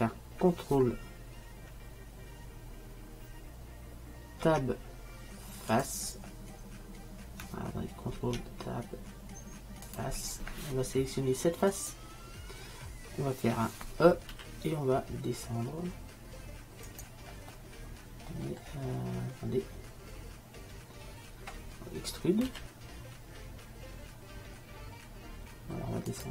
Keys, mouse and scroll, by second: 4.5 ctrl+t, 8.3 ctrl+Tab, 11.9-13.6 right drag, 14.4 e, 19.5-22.4 middle drag, 22.6 e.